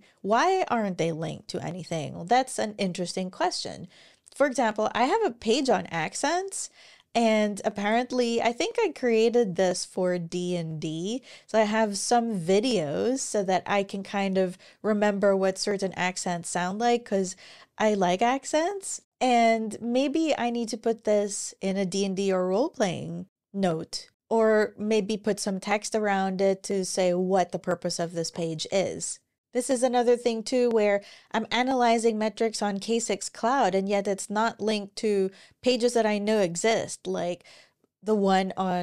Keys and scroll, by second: 28.0 super+w.